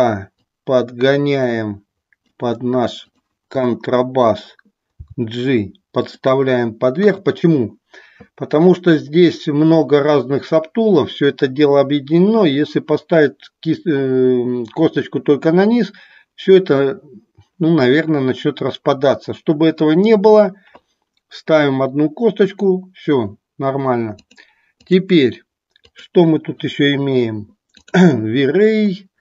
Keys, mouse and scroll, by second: 0.4-2.4 drag, 3.0 click, 4.9 g, 6.2 click, 24.3-25.1 drag, 26.1 click.